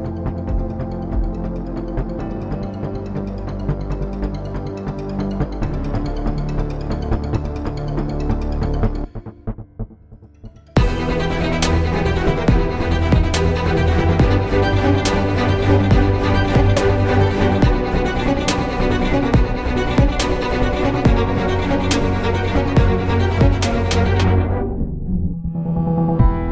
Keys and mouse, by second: 0.0 g, 3.1 ctrl+b, 5.6 Tab, 9.3 Tab, 10.0 ctrl+Tab, 10.6 click, 10.7 z, 11.0 c, 11.8 z, 12.8 s, 17.8 ctrl+KP_1, 18.4 z, 19.1 s, 20.0 z, 21.7 ctrl+Tab, 23.5 ctrl+b, 25.2 Tab.